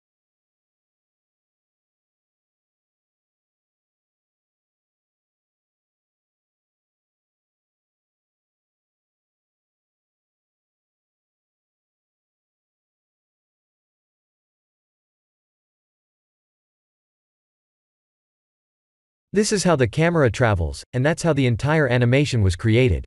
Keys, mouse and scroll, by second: 1.5 click, 13.7 click, 14.4 click, 16.1 KP_0, 17.7 middle click, 18.2-19.1 scroll down 7, 18.6 middle click, 20.4 click, 22.3 click.